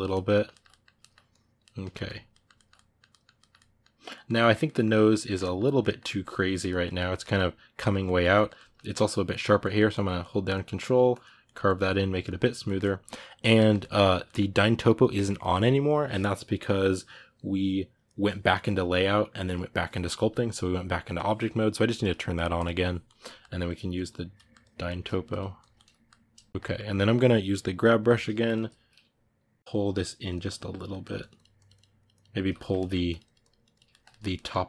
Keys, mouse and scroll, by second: 0.0-1.1 middle drag, 1.1 click, 1.4-9.7 middle drag, 9.7-11.2 ctrl+drag, 11.2 ctrl+middle click, 11.7 ctrl+click, 12.4-23.4 ctrl+middle drag, 23.4 ctrl+click, 24.1 ctrl+middle click, 24.4 ctrl+click, 24.6 ctrl+middle click, 25.1 click, 25.5 ctrl+middle click, 26.3 shift+click, 26.5-27.9 middle drag, 27.9 g, 28.0 f, 29.5 g, 29.6 click, 30.3 middle click, 31.0-32.4 drag, 32.4 ctrl+shift+middle click, 32.9 click, 33.7 ctrl+shift+middle click, 34.4 click.